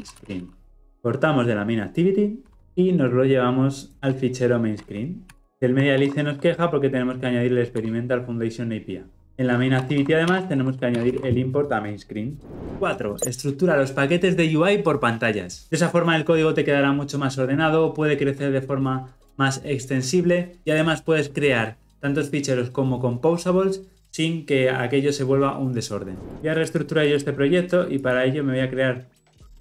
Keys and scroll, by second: 2.6 ctrl+x, 3.9 ctrl+v, 5.2 ctrl+alt+l, 5.5 alt+Return, 9.9 alt+Return, 10.9 ctrl+alt+l, 11.2 ctrl+alt+o, 26.3 Delete.